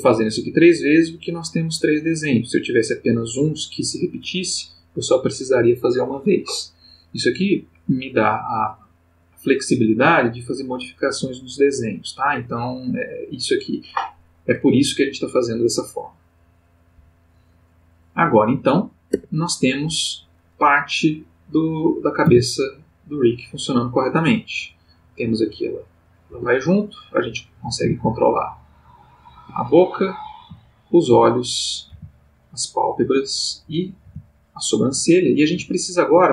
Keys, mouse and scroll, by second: 19.1 Tab, 21.5 click, 22.3 r, 26.3 Escape, 27.1 click, 27.8 g, 29.3 Escape, 29.9 click, 30.5 g, 31.1 Escape, 31.7 click, 31.9 g, 33.0 Escape, 33.5 click, 34.0 g, 35.0 Escape, 35.7 ctrl+middle click.